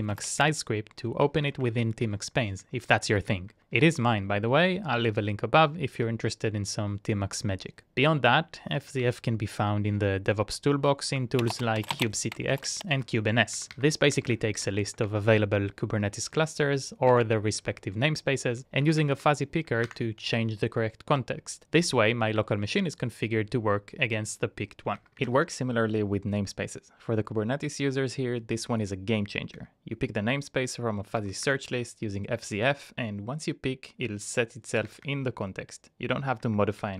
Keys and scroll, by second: 0.4 Up, 0.6 Up, 0.8 Up, 1.2 Up, 1.4 Up, 1.6 Up, 7.4-9.2 typing, 11.3 Return, 11.4-12.1 typing, 12.9 Up, 13.5 Up, 13.7 Up, 14.1 Up, 14.3 Up, 14.6 Down, 18.8 Up, 19.0 Up, 20.0 Return, 23.5-25.7 typing, 29.5 Up, 31.2 Up, 31.6 Return, 34.7 Up, 34.7 Return, 35.0 Up, 36.5-36.9 typing.